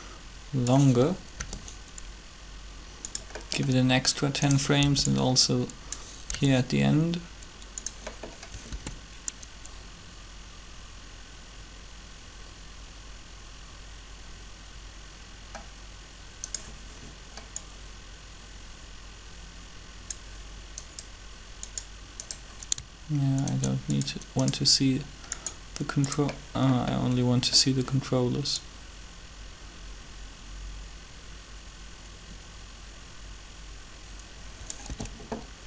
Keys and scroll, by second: 1.4 g, 4.8 b, 7.3 g, 8.7 alt+a, 34.9 alt+a.